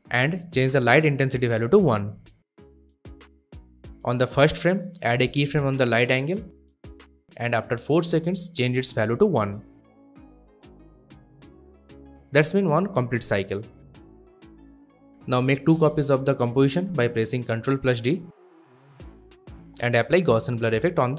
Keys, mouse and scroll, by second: 1.2 click, 1.7 1, 2.0 Return, 3.9-4.7 drag, 11.4 1, 11.6 Return, 12.9-15.1 drag, 15.9 ctrl+d, 16.9 click, 20.1 click, 20.6 shift+click.